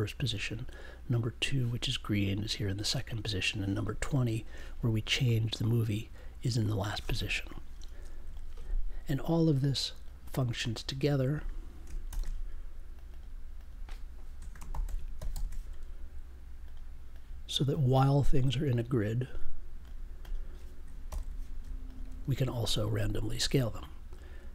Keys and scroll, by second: 12.0 shift+super+e, 14.3-15.8 typing, 21.0 super+j.